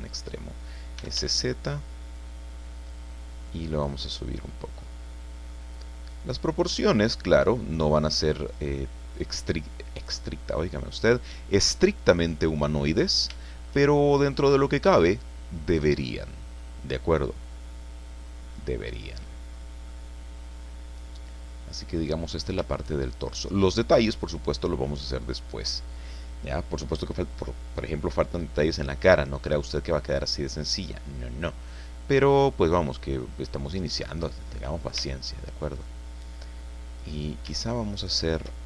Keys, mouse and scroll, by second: 0.7-1.6 typing, 2.0 click, 3.1 click, 4.0 middle click, 5.0 middle click, 5.8-6.2 scroll up 1, 6.6-8.7 drag, 8.7 middle click, 9.2-10.3 drag, 10.4-10.9 scroll down 1, 10.9-12.8 drag, 13.0 scroll up 1, 13.4 shift+click, 14.2-19.0 middle drag, 19.2-19.5 scroll up 1, 19.9-22.1 middle drag, 22.3 scroll up 1, 22.7 shift+middle click, 23.6 shift+scroll down 1, 23.8 middle click, 24.5 scroll down 2, 24.7 middle click, 25.0-25.3 scroll up 2, 25.3-28.2 middle drag, 28.5 scroll down 2, 29.0 middle click, 30.8 click, 31.7-34.4 middle drag, 35.0 Tab, 35.3 click, 35.5 middle click, 37.0 right click, 37.9 shift+right click.